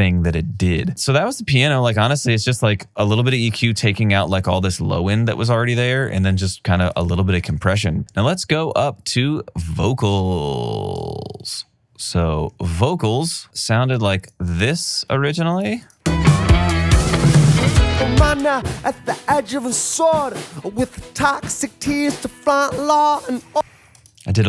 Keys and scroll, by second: 5.9 alt+super+w, 7.7 alt+super+w, 16.0 space.